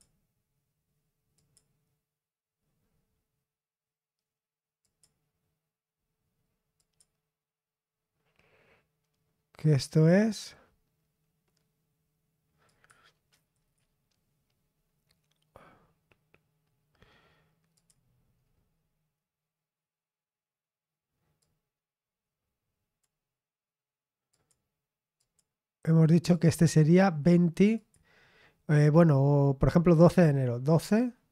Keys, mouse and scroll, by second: 1.4 click, 4.8 click, 6.8 click, 12.7 click, 13.5 click, 17.7 click, 18.3-19.0 scroll down 2, 21.4-23.5 drag, 24.3 click, 25.2 click, 26.3 click, 27.8 click.